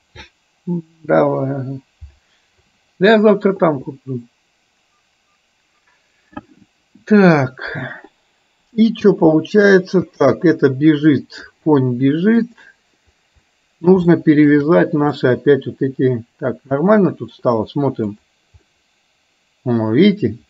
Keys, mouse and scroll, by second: 8.2 middle click, 10.1 space, 10.7-11.6 middle drag, 12.3 click, 13.5-14.0 middle drag, 14.2-14.6 shift+middle drag, 15.2-17.5 middle drag, 18.7-20.4 middle drag.